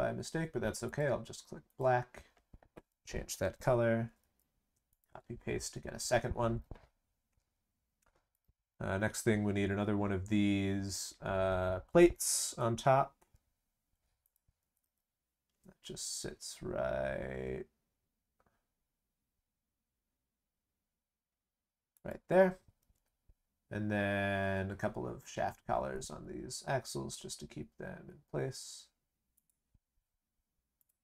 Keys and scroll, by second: 4.0 ctrl+c, 4.1 ctrl+v, 14.6 ctrl+c, 14.8 ctrl+v.